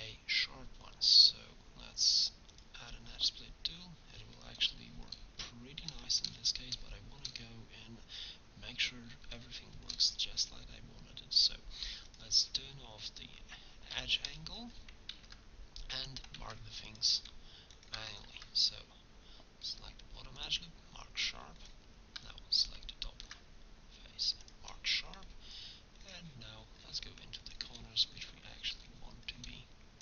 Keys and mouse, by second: 10.0-13.9 drag, 14.0 Tab, 15.2 ctrl+Tab, 16.5 ctrl+Tab, 18.3 ctrl+e, 21.0 click, 23.1 ctrl+e, 24.5 middle click, 28.0 click, 28.2 click, 28.8 middle click.